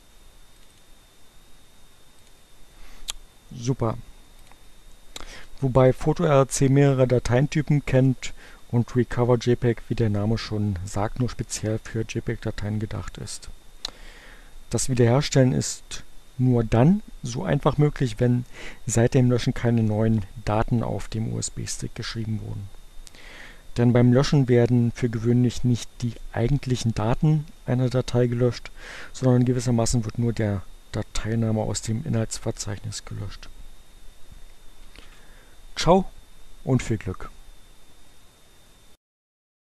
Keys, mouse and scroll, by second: 0.1-1.3 drag, 2.0 click.